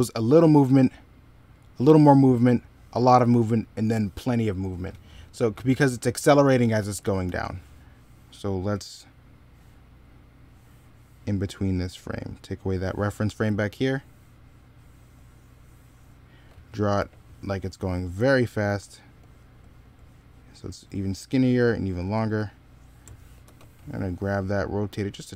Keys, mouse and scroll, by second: 6.6 e, 7.0 b, 16.8 ctrl+z, 23.3 s.